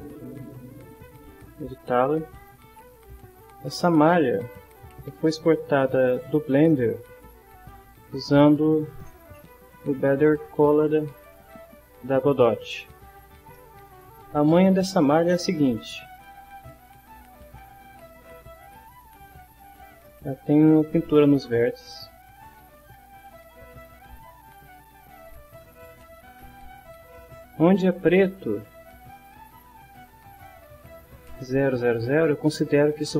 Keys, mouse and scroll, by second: 0.8 click, 6.3 click, 7.9 click, 13.6 shift+middle click, 16.3 click, 17.4 right click, 18.6 click, 22.0 click, 24.2 click, 25.3 click, 30.4 click.